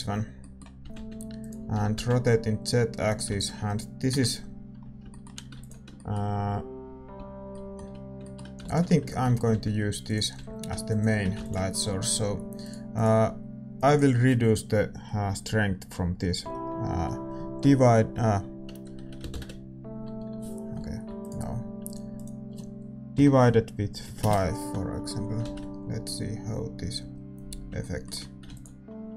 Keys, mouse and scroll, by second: 0.9 shift+d, 1.7 r, 4.1 ctrl+s, 4.1 KP_0, 5.0-26.6 middle drag, 5.9 ctrl+s, 9.5 ctrl+s, 9.5 g, 10.3 r, 26.6 shift+z, 28.4 ctrl+s, 28.4-29.1 middle drag.